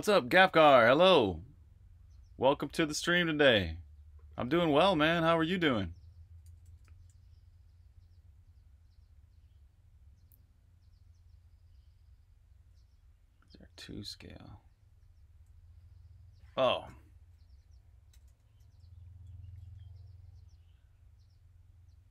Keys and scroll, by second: 6.3-6.7 typing, 12.2-12.6 typing, 14.9 typing, 17.3-20.1 typing.